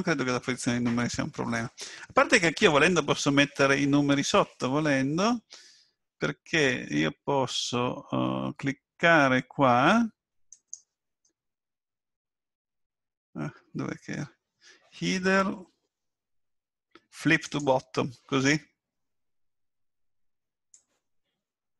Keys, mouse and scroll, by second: 2.7 right click, 10.5 right click, 20.7 click.